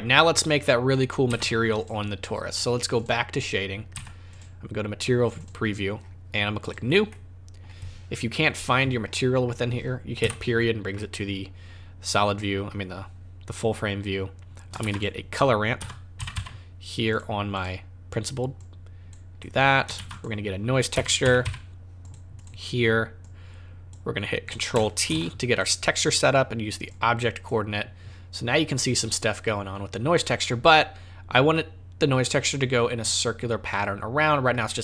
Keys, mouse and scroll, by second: 1.3 z.